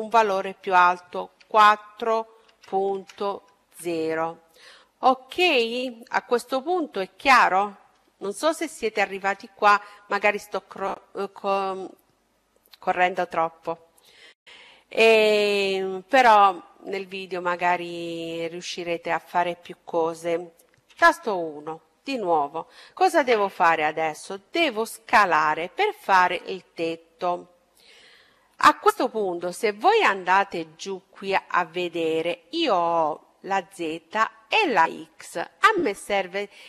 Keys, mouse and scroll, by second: 5.4-7.1 middle drag, 7.2 middle click, 20.0 KP_1.